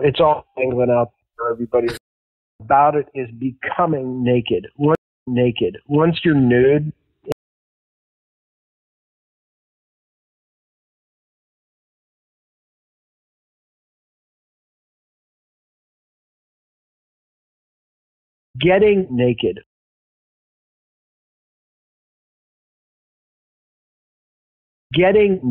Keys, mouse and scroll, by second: 0.5-1.9 drag, 2.4 click, 2.5 space, 3.2 click, 4.9 space, 5.1 click, 5.2 space, 5.6-7.2 drag, 9.1 ctrl+x, 9.5 ctrl+v, 10.1 click, 11.4 click, 12.3 ctrl+v, 13.4-16.2 drag, 18.4 click, 18.4 space, 19.9 space, 20.0-21.3 drag, 21.6 click, 22.5 click, 23.4-24.4 drag, 24.7 click.